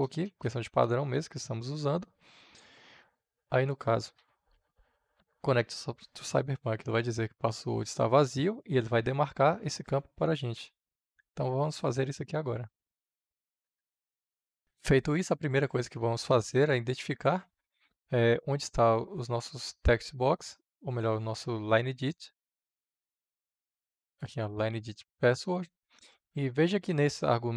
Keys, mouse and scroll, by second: 23.8-27.5 drag.